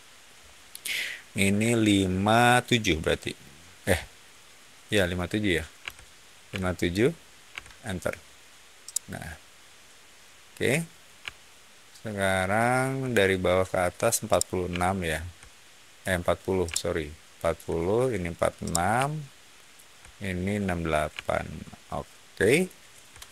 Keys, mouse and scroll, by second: 5.7 5, 6.4 7, 7.4 Return, 8.8-12.6 middle drag, 14.2-15.9 shift+middle drag, 16.6 shift+middle click, 18.5-19.6 shift+middle drag, 21.1-22.5 shift+middle drag, 22.8 shift+middle click.